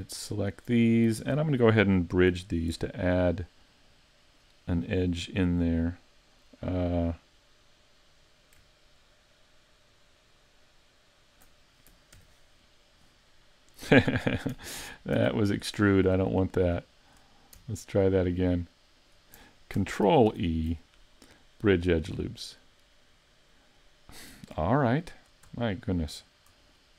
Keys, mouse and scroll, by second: 0.3 alt+shift+right click, 2.7 ctrl+b, 4.4 right click, 12.2 e, 13.8 right click, 14.8 z, 15.2 z, 16.6 shift+right click, 19.0 alt+right click, 20.3 ctrl+e, 26.6 shift+right click.